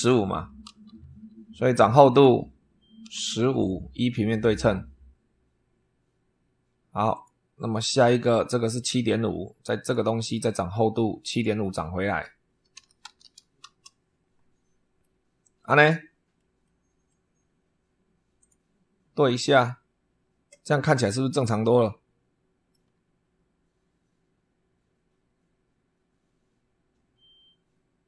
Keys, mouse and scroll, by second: 0.6 super+3, 2.0 click, 2.9 1, 3.3 5, 4.2 click, 7.0 click, 7.6 middle click, 9.7 click, 11.1 click, 12.4-13.6 typing, 14.9 middle click, 15.8 click, 15.9 middle click, 16.5 middle click, 18.3 click, 19.4 click, 20.9 middle click, 21.2-22.8 drag.